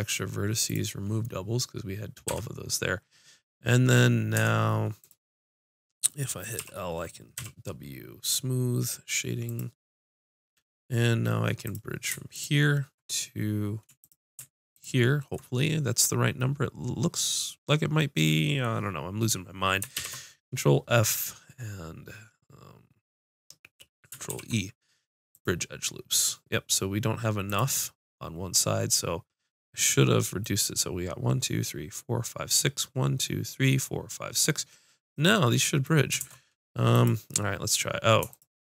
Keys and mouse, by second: 1.8 ctrl+Tab, 4.4 Tab, 5.0-6.6 drag, 6.6 l, 7.4 w, 11.6-16.7 drag, 19.9 ctrl+f, 24.3 ctrl+e, 36.2 ctrl+Tab, 38.3-38.6 drag.